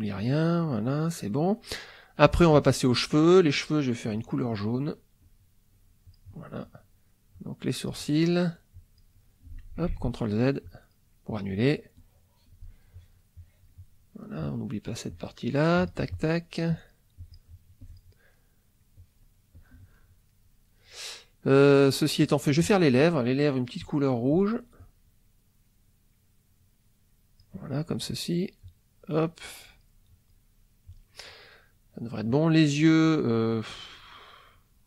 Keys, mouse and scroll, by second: 1.3 middle click, 1.8 middle click, 4.1 click, 5.2 click, 5.7 click, 7.3 click, 8.7 click, 9.9 ctrl+z, 10.6 click, 11.3 click, 12.0 click, 12.9 click, 13.4 click, 14.4 click, 15.1 click, 15.8 click, 16.7 click, 17.2 click, 17.8 click, 18.3 middle click, 19.0 click, 19.5 click, 20.0-22.3 middle drag, 24.3 click, 24.8-27.6 drag, 28.6-30.0 drag, 30.9 click.